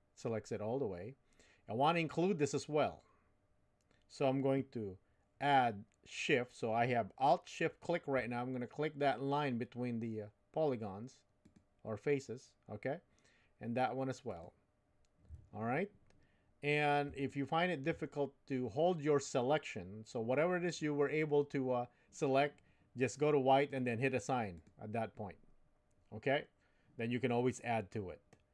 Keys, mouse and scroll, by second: 11.4 alt+shift+click, 17.2 shift+middle click, 23.7 click, 24.5 click, 28.3 middle click.